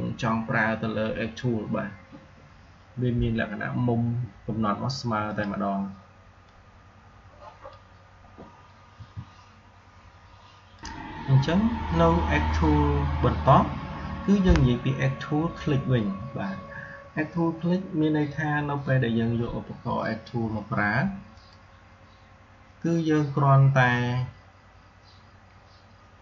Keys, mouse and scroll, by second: 5.2-8.8 drag, 8.8 Delete, 10.6 click, 21.2 click.